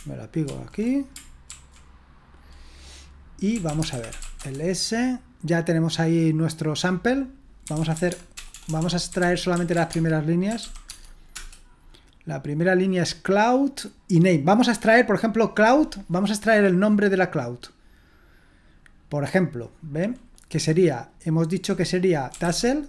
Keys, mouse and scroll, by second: 0.4 ctrl+d, 1.5 ctrl+d, 3.2-4.7 typing, 7.5-11.1 typing, 11.3 Return, 18.1-22.3 drag, 22.1-22.8 typing.